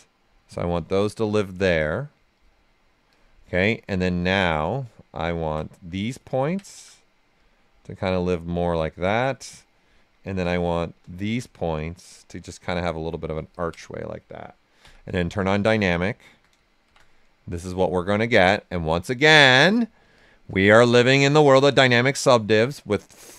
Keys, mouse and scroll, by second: 5.3 ctrl+space, 6.1 ctrl+click, 7.3-9.1 drag, 9.1 ctrl+click, 10.4 ctrl+space, 12.0-13.5 drag, 14.8-16.8 typing, 17.0-18.4 right drag, 18.4-20.1 drag, 20.7-22.4 drag, 22.4-23.3 drag.